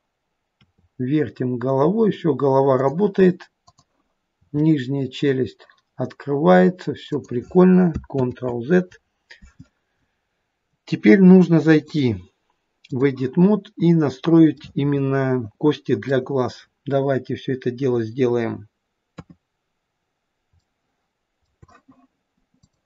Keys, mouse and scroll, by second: 0.6 r, 3.6 click, 4.3 r, 8.3 ctrl+z, 11.8 click, 14.6 middle click, 19.2 KP_3, 20.6 shift+middle click.